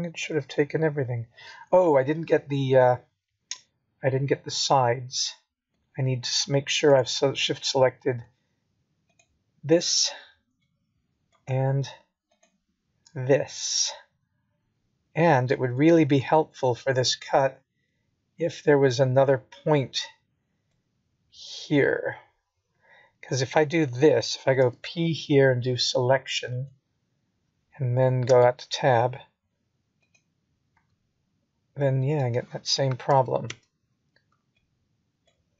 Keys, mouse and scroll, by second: 0.4-1.0 scroll down 1, 1.0 middle click, 1.0 scroll down 1, 4.0 p, 7.0 Tab, 8.0 click, 9.2 g, 11.1 middle click, 13.3 ctrl+z, 14.6 ctrl+z, 16.0 middle click, 26.8 shift+click, 27.8 shift+click, 29.3 middle click, 31.0 shift+click, 32.3 middle click, 34.7 scroll up 2, 35.4 middle click.